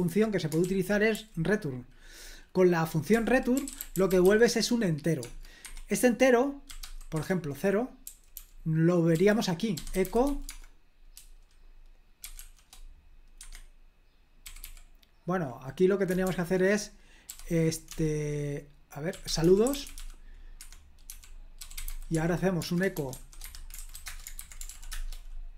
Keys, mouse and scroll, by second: 0.6 super+l, 1.1 j, 2.9-5.2 typing, 5.6 Escape, 6.5-10.8 typing, 12.2 typing, 13.4 Escape, 14.4 typing, 16.3 o, 17.3 e, 18.9-24.2 typing, 20.6 Escape, 23.4 Escape, 24.3 super+h.